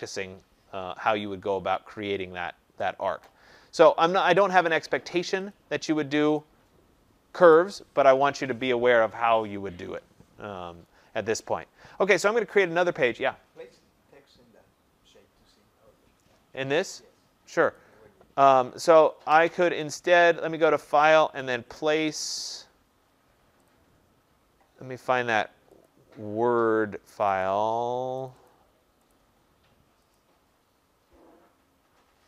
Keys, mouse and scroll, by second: 4.2 click, 4.7 click, 5.5 click, 6.3 click, 7.4 Delete, 17.7 click, 20.7 click, 23.6 click, 27.2 click, 27.4 click, 28.2 click, 28.4 click, 29.0 click, 30.1 click.